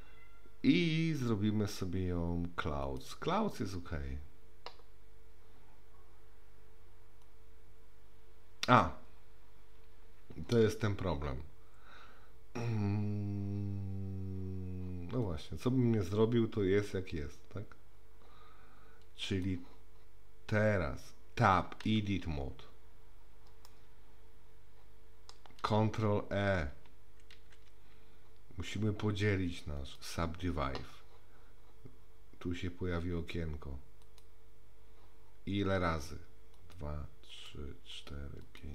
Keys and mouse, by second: 1.1-3.0 drag, 7.2-8.8 drag, 15.3-19.4 drag, 21.9 Tab, 23.7-25.3 middle drag, 27.4 ctrl+e, 34.0 click, 36.6 click, 37.3 click, 37.9 click, 38.4 click.